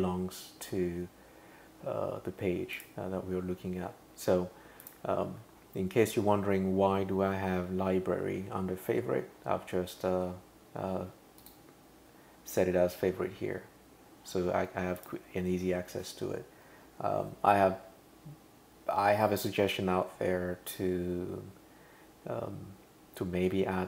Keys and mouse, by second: 2.8 click, 4.8 click, 11.4 click, 15.0 click.